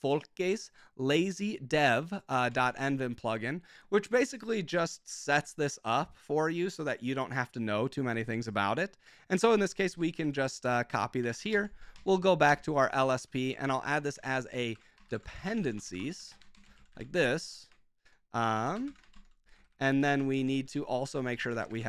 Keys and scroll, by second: 2.4 ctrl+c, 9.5 ctrl+c, 10.2 super+k, 10.6 Escape, 11.0-21.8 typing, 12.4 Return.